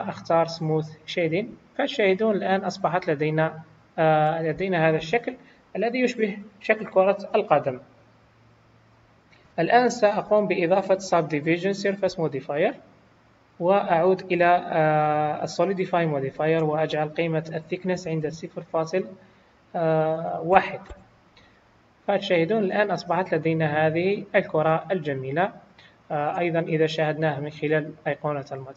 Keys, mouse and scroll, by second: 2.6 middle click, 5.0 KP_1, 8.7 click, 9.9 click, 14.4 click, 16.3 click, 22.1 click, 22.7 middle click, 25.8 click, 26.7 middle click, 28.5 middle click.